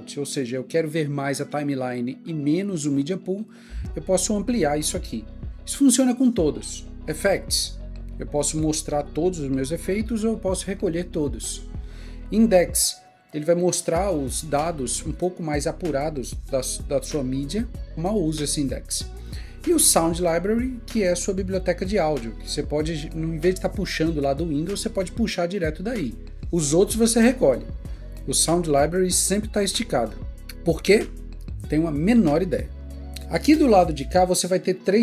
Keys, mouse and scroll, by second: 27.7 double click.